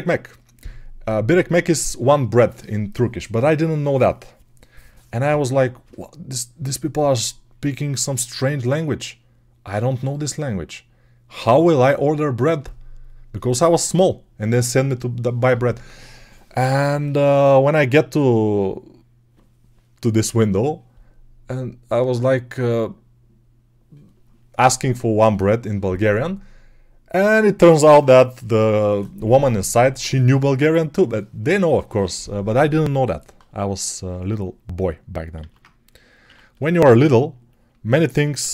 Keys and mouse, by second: 35.2 alt+q, 35.2 alt+click, 36.1 1.